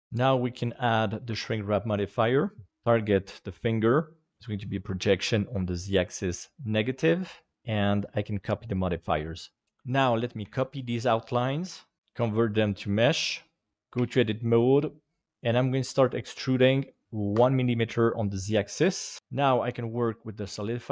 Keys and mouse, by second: 0.2-2.4 drag, 2.9 click, 4.3 click, 5.4 click, 6.0 click, 6.3 click, 7.5-8.9 drag, 10.4 shift+d, 12.0 alt+c, 13.7 Tab, 14.0 a, 15.2 e, 16.9 click, 19.2-20.5 drag.